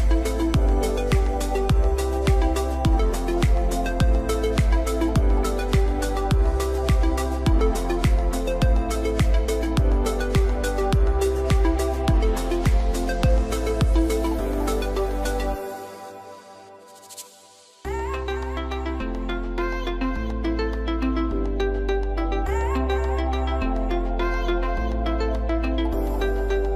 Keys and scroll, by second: 0.5 ctrl+x, 1.1 ctrl+g, 1.8 ctrl+u, 2.1 ctrl+x, 2.4 ctrl+f, 3.4 ctrl+f, 6.2 ctrl+a, 6.7 ctrl+f, 9.3 BackSpace, 9.3 Return, 9.9 ctrl+g, 10.1 ctrl+v, 10.2 ctrl+a, 10.3 ctrl+g, 10.5 ctrl+x, 11.0 ctrl+a, 11.6 ctrl+g, 12.1 ctrl+x, 12.7 ctrl+u, 13.5 ctrl+f, 18.6 ctrl+a, 19.0 ctrl+f, 22.0 2, 22.3 Return, 22.6 ctrl+a, 22.7 ctrl+g, 22.8 ctrl+v, 23.0 ctrl+g, 23.1 ctrl+x, 23.5 ctrl+z, 23.7 ctrl+g, 23.7 ctrl+x, 24.1 ctrl+v, 25.2 ctrl+u, 25.6 ctrl+x, 25.8 ctrl+f.